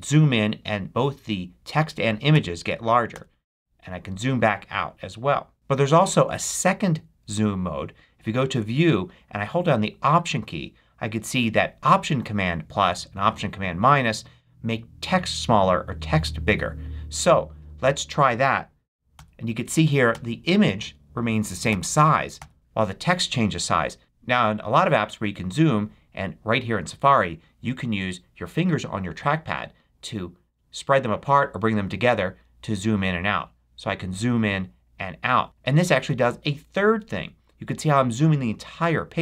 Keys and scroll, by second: 2.2 super+-, 19.1 alt+super+=, 20.1 alt+super+=, 21.6 alt+super+-.